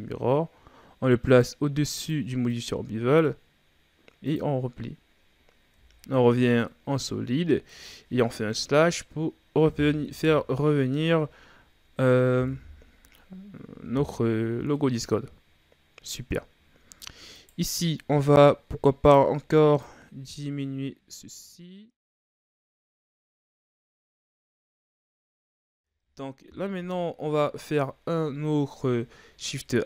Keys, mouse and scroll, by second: 1.4-2.1 drag, 2.5-3.2 drag, 4.3-5.7 drag, 5.7 z, 6.1-6.7 scroll down 2, 6.7-8.6 middle drag, 8.6 KP_Divide, 10.1 KP_3, 11.0 a, 11.3-12.3 scroll down 5, 12.5 KP_1, 13.5-14.2 scroll up 7, 14.2-14.8 scroll down 4, 14.8-16.4 middle drag, 16.4-17.4 ctrl+scroll up 7, 17.4 right click, 19.0-22.8 drag, 26.7 KP_1, 29.4 shift+a.